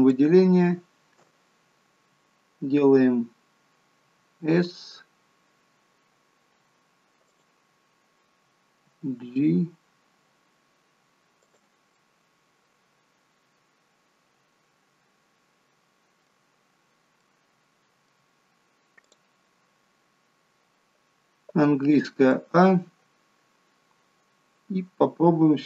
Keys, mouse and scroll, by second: 0.0 alt+shift+click, 0.1 alt+shift+click, 3.9 s, 8.8 g, 11.9 middle click, 17.1 middle click, 18.9 click, 21.8 a, 22.3 middle click.